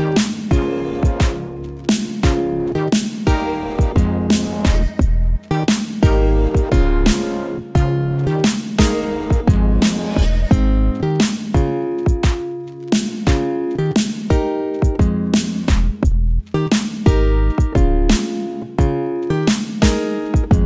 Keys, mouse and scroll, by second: 0.4 click, 2.7 ctrl+d, 4.3 click, 7.1 ctrl+click, 16.2 click, 20.2 click.